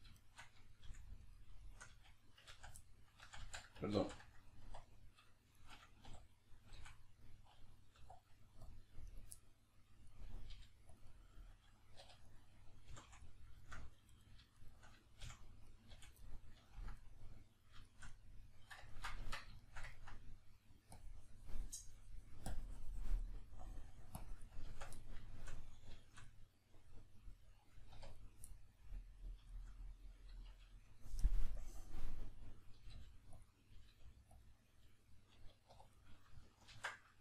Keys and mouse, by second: 0.2 shift+right click, 0.9 f, 1.2 right click, 1.6 shift+right click, 1.9 f, 2.8 middle click, 3.2 ctrl+z, 4.9 right click, 5.5 shift+right click, 6.1 d, 9.1 right click, 9.3-11.0 middle drag, 10.5 g, 11.0 click, 11.1-12.3 middle drag, 12.0 2, 12.3 right click, 12.9 f, 13.2 middle click, 14.1 right click, 14.6 shift+right click, 15.2 f, 15.6 right click, 15.9 f, 16.2-20.9 middle drag, 19.2 Tab, 20.9 click, 23.4 middle click, 24.2 click, 24.7 b, 25.0-28.2 middle drag, 27.9 1, 28.2 right click, 28.5-31.5 middle drag, 31.5-32.7 drag, 32.7 g, 33.5 click, 33.7 g, 34.5 click, 34.9-35.9 middle drag, 35.7 2, 35.9 right click, 36.7 ctrl+x.